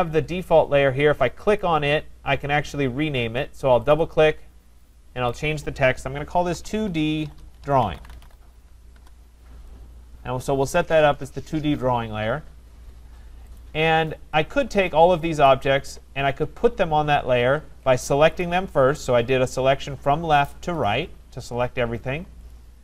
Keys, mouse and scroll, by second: 1.6 click, 2.5 click, 3.9 click, 4.2 click, 5.3 click, 6.6-8.9 typing, 13.6 click, 15.5 click, 18.4 click, 20.8 click.